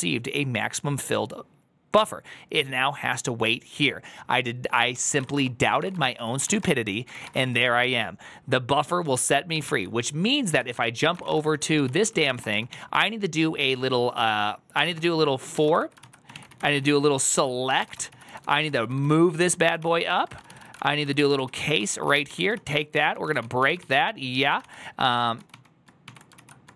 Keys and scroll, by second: 4.8-7.2 typing, 7.0 ctrl+c, 7.0 Return, 7.3 Return, 9.5 ctrl+h, 10.4 ctrl+s, 10.8-13.1 typing, 11.7 ctrl+c, 14.4-26.7 typing, 19.6 ctrl+c, 26.3 ctrl+c.